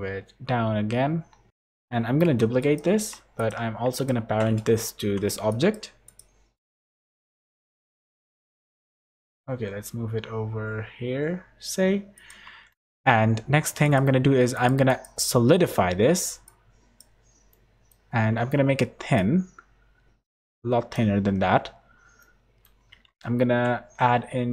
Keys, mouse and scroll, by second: 1.5 Tab, 1.5 Tab, 2.2 p, 2.9 Tab, 3.3 click, 3.9 shift+click, 5.0 ctrl+p, 6.0 click, 6.5 click, 6.9 shift+click, 7.3 middle click, 7.7 scroll up 2, 8.0 g, 12.7 middle click, 13.8 click, 14.5 click, 17.5 middle click, 19.1 shift+click, 22.2 middle click, 23.4 ctrl+1.